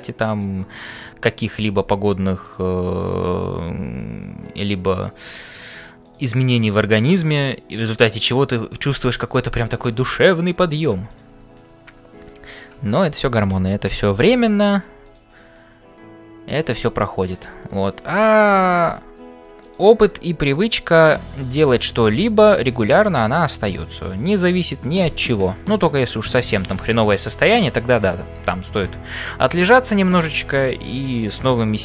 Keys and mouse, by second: 0.0-31.8 typing, 3.0 click, 6.4-7.5 middle drag, 8.1 click, 12.8 shift+click, 15.0 click, 15.6 middle click, 24.1 shift+click, 27.3 click, 27.7 middle click.